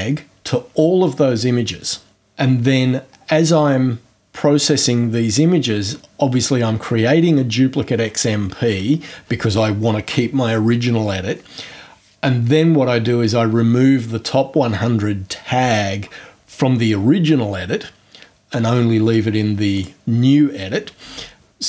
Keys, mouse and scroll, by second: 19.7 click.